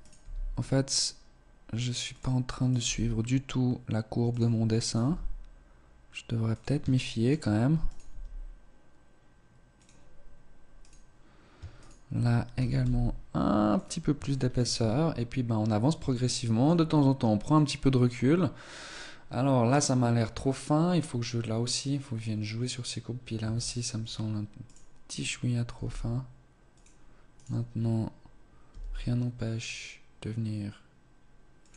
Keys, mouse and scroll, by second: 0.1 g, 2.1 right click, 2.1 g, 4.7 right click, 4.9 g, 6.9 shift+middle click, 7.7 right click, 7.7 g, 10.7 right click, 11.7 shift+right click, 12.5 g, 14.2 shift+middle click, 14.3 Tab, 15.0-15.8 scroll down 2, 15.8 shift+middle click, 23.3 Tab, 23.9-24.9 scroll up 1, 24.9 right click, 24.9 g, 27.3 right click, 28.6 g.